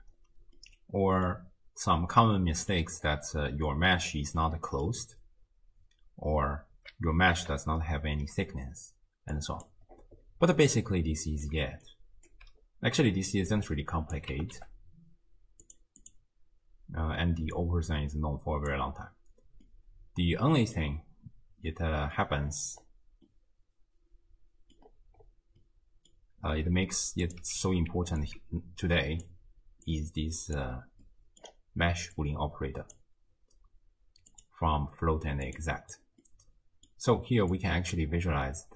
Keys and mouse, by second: 0.7-1.3 middle drag, 2.3-2.9 middle drag, 4.4 middle click, 9.4-9.8 drag, 10.7-11.5 middle drag, 11.1 click, 11.6 d, 11.9 right click, 12.3 d, 12.4 d, 13.5-14.2 drag, 14.4 g, 16.0 click, 17.6-18.7 drag, 19.7-20.8 middle drag, 21.7-22.2 middle drag, 23.3-24.8 middle drag, 25.6-26.2 middle drag, 27.2 click, 27.7 ctrl+x, 28.2-29.3 alt+drag, 29.9-30.6 drag, 31.1-31.5 middle drag, 32.2-33.0 drag, 34.3 click, 36.3-36.9 middle drag, 37.6-38.0 drag, 38.5-38.7 middle drag.